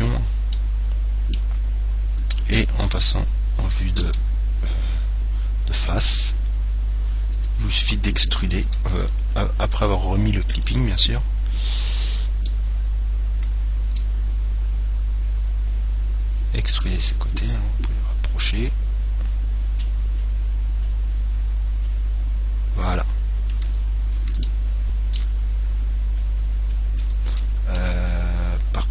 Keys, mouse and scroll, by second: 0.0 click, 0.8-2.6 middle drag, 3.2 KP_1, 4.3 KP_3, 5.8-8.0 middle drag, 7.6 e, 10.7 click, 14.1 e, 17.0-19.7 drag, 23.4-24.7 scroll up 1, 24.7-26.5 middle drag, 26.5 scroll up 1, 26.7-28.9 middle drag.